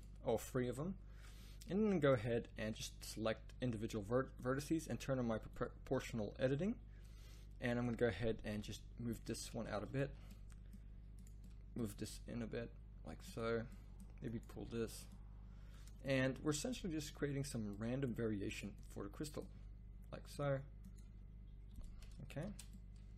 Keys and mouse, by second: 0.6 a, 2.0 click, 2.3 z, 7.6 middle click, 8.6 g, 10.0 z, 12.0 g, 14.5 g, 16.5 g, 19.4 g, 21.0 g, 22.4 Tab.